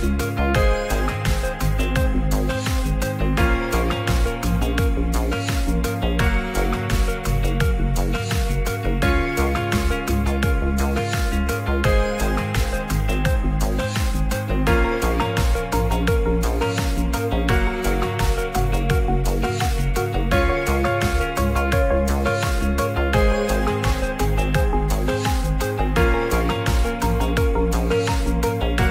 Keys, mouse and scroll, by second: 1.6 alt+z, 1.9 click, 2.6 click, 3.1 click, 4.5 click, 6.2 click, 8.2 click, 10.3 c, 11.7 alt+d, 12.4 ctrl+z, 13.0 ctrl+z, 13.4 click, 13.9 click, 16.9 c, 17.8 shift+d, 18.6 click, 20.8 click, 23.1 click, 24.2 shift+middle click, 24.8 click, 26.4-27.6 drag, 28.0 click, 28.5 click.